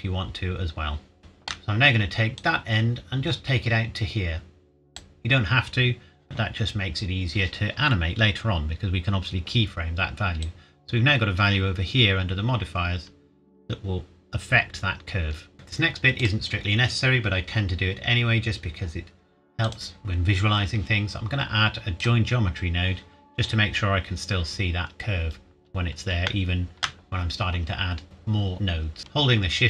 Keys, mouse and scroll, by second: 1.2 shift+middle click, 1.2 shift+scroll up 1, 2.4 click, 10.4 click, 16.2 click, 19.6 click, 22.0 click, 26.1 shift+Num_Lock, 26.1 click, 26.3 shift+middle click, 29.0 shift+Num_Lock, 29.0 shift+right click.